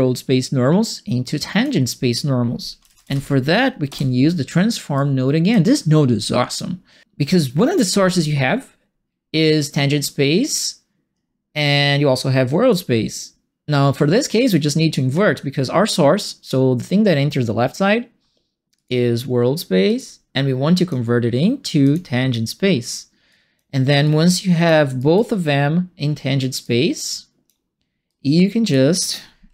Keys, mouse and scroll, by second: 2.5-3.6 typing, 4.9 click, 18.7 click, 19.8 click, 20.7 click, 21.8 click, 23.2 click, 24.0 click, 24.9 right click, 26.6 click, 28.0 click.